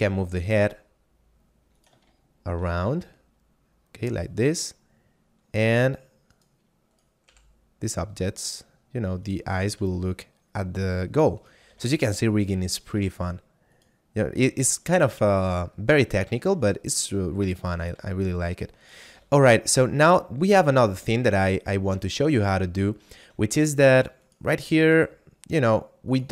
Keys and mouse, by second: 1.9 right click, 2.3 shift+middle click, 2.9 g, 6.3 right click, 7.4 g, 9.3 right click, 9.9 g, 11.5 right click, 11.6 a, 12.2 shift+middle click, 13.8 right click, 15.7 shift+middle click, 17.6 middle click, 18.1 r, 18.9 right click, 19.3 a, 21.8 middle click, 22.8 shift+middle click, 24.3 right click, 25.0 a, 26.1 right click.